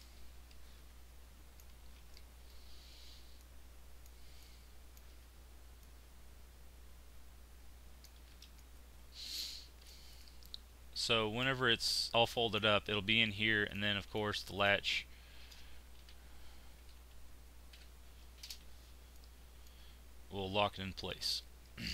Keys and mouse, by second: 1.8 z, 3.3 middle click, 6.7-7.9 middle drag, 8.1 z, 8.5 middle click, 11.7-13.7 middle drag, 15.3 shift+r, 19.1-21.4 middle drag, 21.4 click.